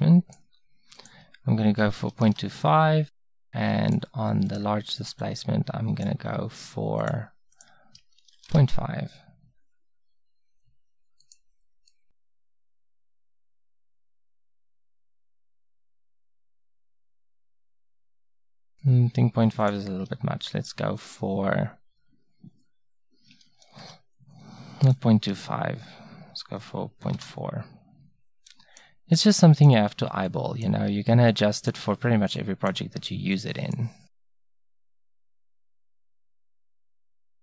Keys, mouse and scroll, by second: 10.5-12.0 middle drag, 36.8-37.4 drag.